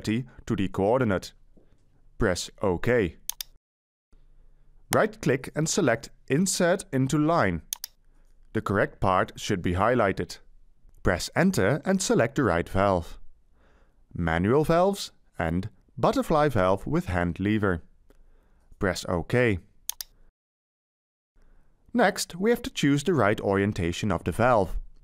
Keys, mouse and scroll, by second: 10.8 Return.